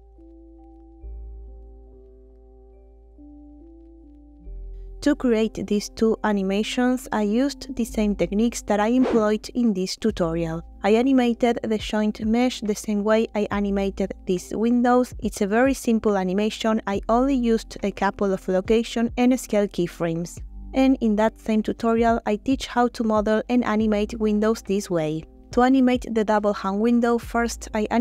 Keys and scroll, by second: 1.5 space, 4.4 space.